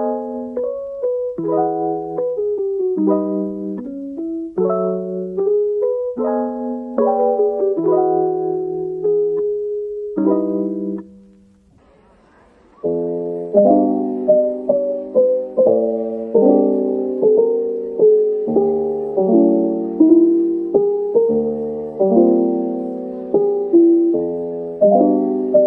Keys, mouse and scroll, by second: 2.9 a, 4.7-5.2 scroll down 1, 5.0-5.7 typing, 6.6 scroll, 6.7-7.0 scroll up 1, 7.5 middle click, 8.3-8.7 typing, 9.2 scroll down 1, 10.7-11.6 typing, 12.8-13.6 typing, 14.8-15.8 typing, 17.3 middle click, 18.6-18.9 typing, 21.0 middle click, 22.1 scroll up 1, 22.7 middle click, 25.0-25.6 typing.